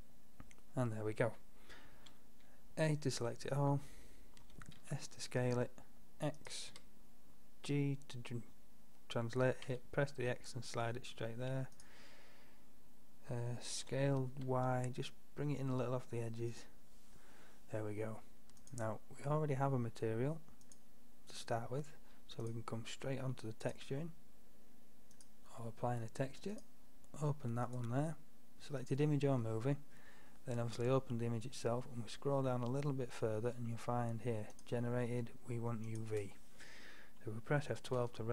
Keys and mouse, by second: 0.8-1.6 drag, 1.6 middle click, 2.0 a, 4.5 s, 6.8 g, 13.8 s, 18.7-20.5 drag, 20.7-25.2 drag.